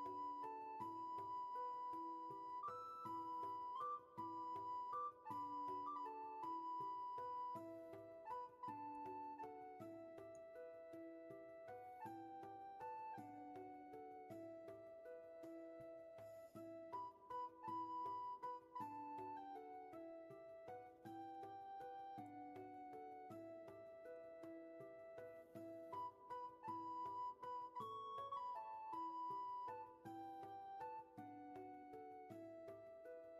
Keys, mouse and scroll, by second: 31.7 ctrl+z.